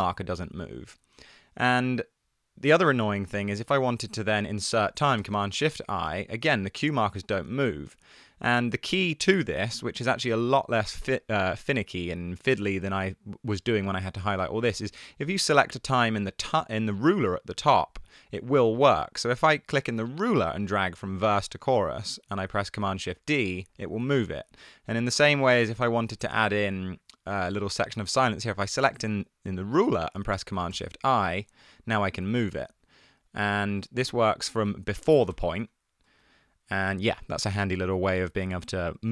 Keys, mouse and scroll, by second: 1.0 super+z, 7.0 super+z, 23.0 shift+super+d, 24.2 super+z, 30.8 shift+super+i, 32.2 super+z, 35.4 shift+super+i, 36.4 super+z.